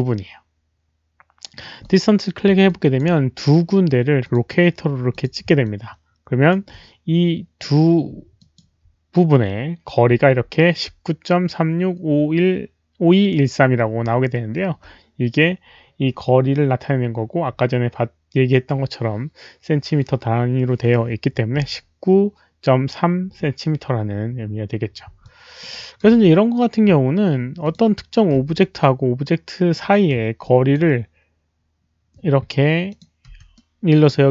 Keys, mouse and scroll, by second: 1.8 click, 1.8 alt+middle click, 1.9 alt+middle click, 2.6 alt+click, 4.2 click, 5.1 alt+click, 5.6 alt+click, 8.4 alt+click, 10.3 alt+middle click, 14.3 alt+middle click, 18.6 alt+click, 25.2 alt+click, 25.7 alt+right click, 26.1 w, 27.6 alt+click, 27.6 alt+right click, 27.6 w, 28.6-29.7 middle drag, 28.6 alt+click, 28.6 alt+right click, 28.6 w, 30.4 alt+click, 30.7 alt+right click, 30.7 w, 32.8 alt+click, 32.8 middle click, 32.8 alt+right click, 32.8 w, 33.5-34.3 middle drag, 33.6 alt+click, 33.6 alt+right click, 33.6 w.